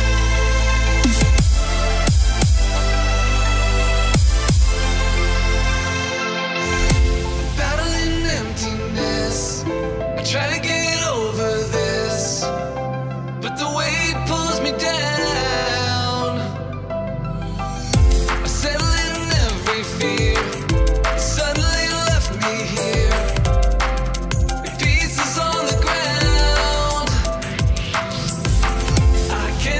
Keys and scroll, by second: 1.4 space, 3.0 +, 3.0 space, 8.4 +, 14.8 space, 18.6 space, 19.1 space, 25.4 space, 27.9 space, 28.9 space.